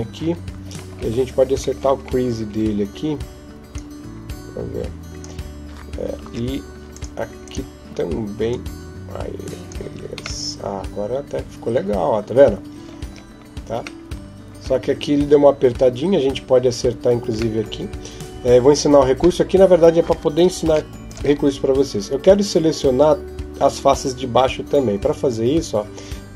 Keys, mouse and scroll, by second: 0.4 scroll up 1, 1.0-1.6 scroll up 16, 2.9 scroll up 11, 3.5 click, 6.1 ctrl+Tab, 7.2 right click, 8.3 click, 9.6 Tab, 10.2 middle click, 12.9-13.4 scroll up 1, 13.6 scroll up 2, 13.8 middle click, 15.6 Tab, 17.4 middle click, 18.1 KP_7, 20.5 ctrl+s.